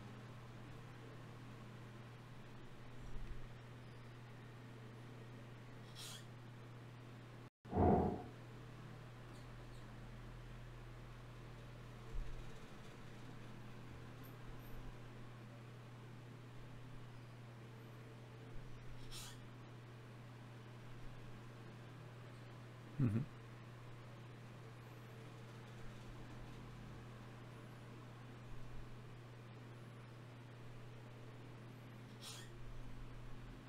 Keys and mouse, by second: 1.1-3.9 middle drag, 4.5 middle click, 4.7-5.9 drag, 4.9 g, 5.9 right click, 6.1 g, 6.7-8.1 drag, 8.1 f, 8.9-11.3 drag, 9.7 g, 12.4-18.2 drag, 17.4 e, 20.6 g, 21.4 s, 23.6 click.